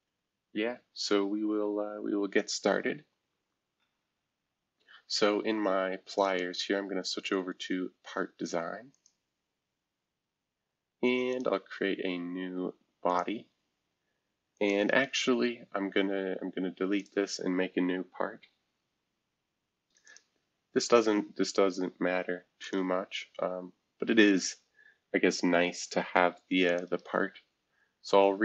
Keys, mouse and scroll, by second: 0.0 Caps_Lock, 3.3 typing, 6.2 click, 8.9 click, 11.3 click, 13.1 click, 14.5 click, 17.0 click, 20.0 click, 22.6 click, 26.7 click, 26.8 right click.